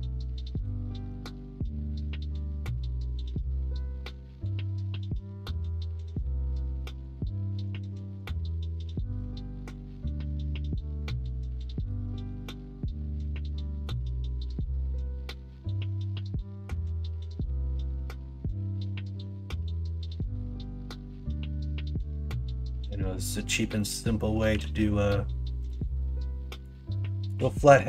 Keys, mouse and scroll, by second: 0.3 2, 3.3-6.8 drag, 6.8 alt+z, 7.9 ctrl+b, 12.3 ctrl+z, 13.1-14.5 middle drag, 17.5 k, 22.3-23.4 middle drag, 23.7 middle click, 24.4 k.